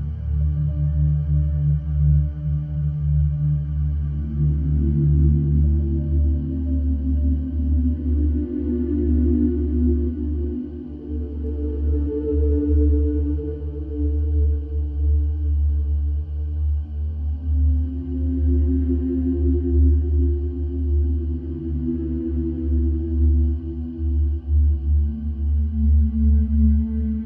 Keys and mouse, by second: 5.1-5.6 alt+drag, 8.9 click, 11.1 click, 12.9-17.7 drag, 20.5-24.8 alt+drag.